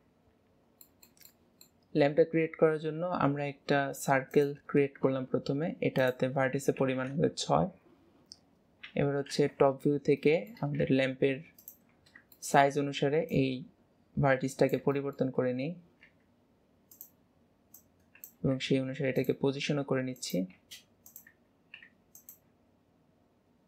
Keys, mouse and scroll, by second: 0.5-1.0 scroll up 2, 1.0-2.2 middle drag, 2.2-3.0 scroll up 1, 3.0 shift+a, 6.1-8.9 drag, 8.9 KP_7, 9.4 alt+z, 10.3-10.9 shift+middle drag, 10.9 s, 12.1 2, 12.5-13.3 middle drag, 13.3 click, 15.1-15.5 middle drag, 15.7-16.1 scroll up 3, 16.1 s.